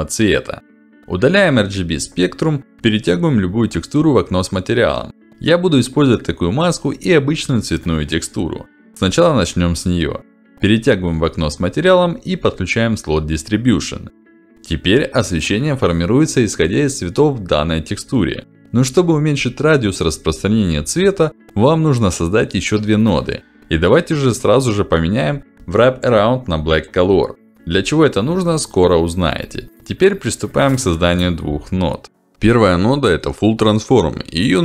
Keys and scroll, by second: 7.6 Left, 22.2 ctrl+alt+d, 32.3 f, 32.5 u, 32.9 l.